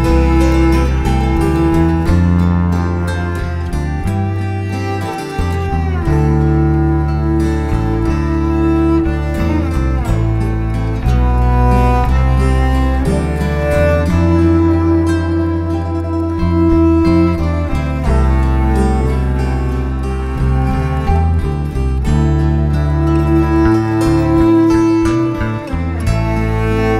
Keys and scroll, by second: 0.0-3.1 typing, 3.7 shift+super+t, 11.0 shift+t, 13.2-14.2 typing, 21.6 shift+super+], 22.3 alt+shift+super+].